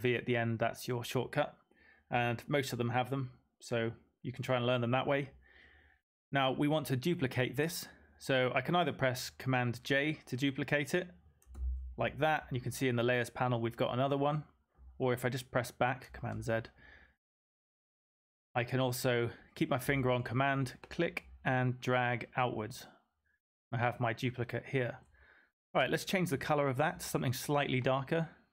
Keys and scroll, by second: 11.5 super+j, 16.1 super+z.